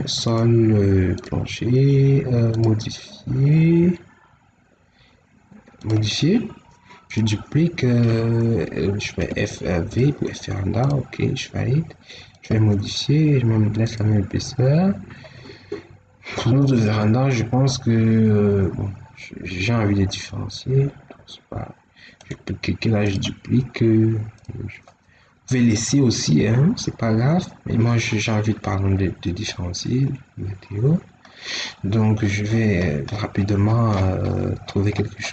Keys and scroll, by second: 9.1 f, 9.8 v.